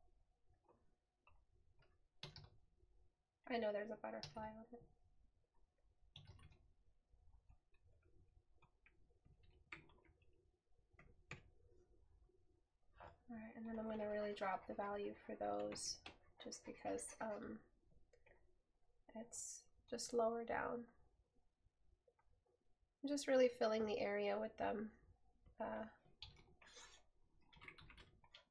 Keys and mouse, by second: 7.6 right click, 10.2 right click, 24.4 right click.